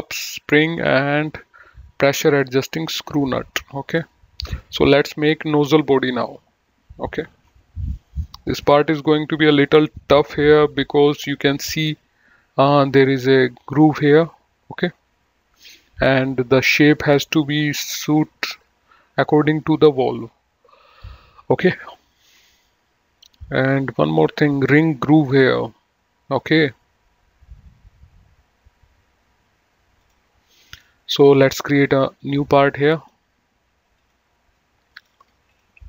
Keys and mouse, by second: 30.3 click, 32.4 click.